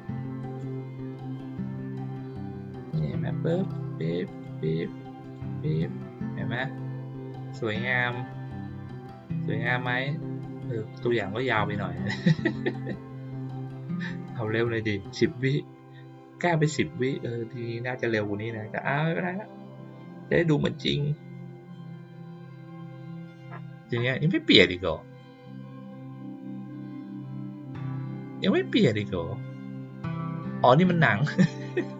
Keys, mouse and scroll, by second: 2.8 click, 3.6 click, 4.2 click, 5.2 click.